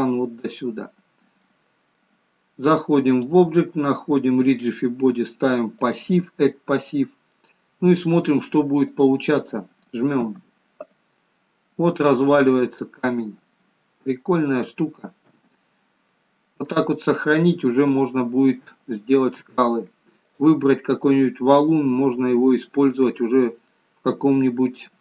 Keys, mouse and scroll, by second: 1.9 middle click, 3.6 click, 7.8 middle click, 9.4 click, 10.6 space, 14.0-14.4 scroll up 2, 14.6 scroll down 1, 15.8 space, 16.4 middle click, 17.8 middle click, 20.7 click, 21.6 middle click, 23.8 scroll up 2, 24.1 middle click.